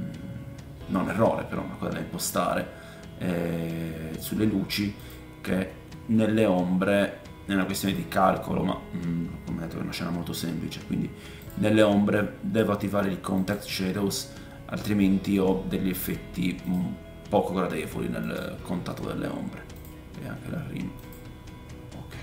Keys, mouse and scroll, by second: 5.0 middle click, 5.0 right click, 7.8 middle click, 7.8 right click, 11.4-13.5 middle drag, 11.4-13.5 right drag, 18.2 middle click, 18.2 right click, 19.7 middle click, 19.7 right click, 21.0 middle click, 21.0 right click.